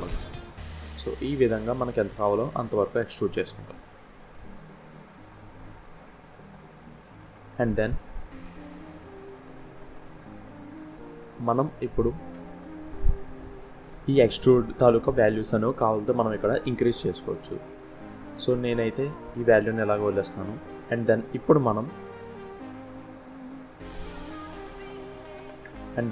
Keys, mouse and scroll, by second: 8.1 scroll down 1, 8.4 middle click, 11.3 scroll up 1, 12.9 click, 18.3-18.7 scroll down 1, 19.6 scroll down 1, 19.7-20.3 scroll up 3, 20.5 scroll down 1, 20.9 middle click, 23.4 scroll down 2, 24.4 scroll up 1, 24.9 scroll down 1, 25.2 middle click.